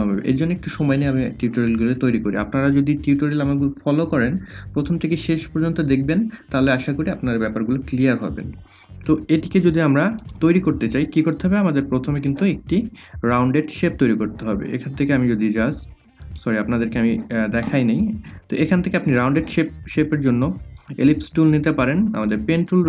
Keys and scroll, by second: 14.9 ctrl+z.